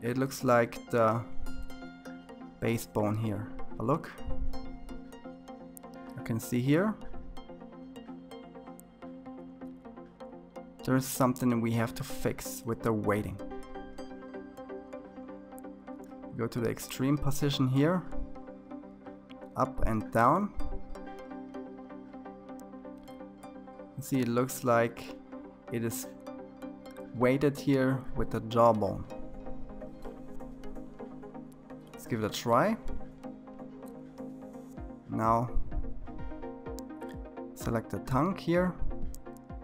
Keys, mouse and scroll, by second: 1.1 click, 3.6 r, 31.1 click, 34.5-36.1 drag.